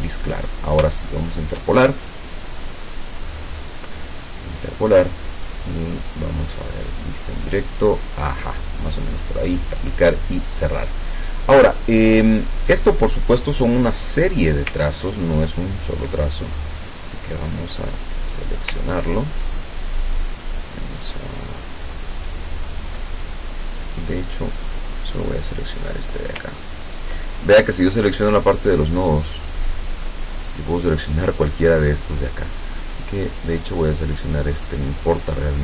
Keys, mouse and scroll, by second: 1.3 shift+click, 2.4 click, 4.7 click, 6.9 click, 9.5 click, 10.1 click, 11.1 click, 14.9-15.5 ctrl+scroll down 2, 15.7 ctrl+scroll down 2, 16.5 ctrl+click, 16.9-18.4 ctrl+drag, 19.0-19.8 ctrl+scroll up 2, 20.2 ctrl+scroll down 2, 24.1 click, 24.7 click, 26.6-26.9 ctrl+scroll up 2, 28.3 click, 33.0 click, 35.3-35.6 drag.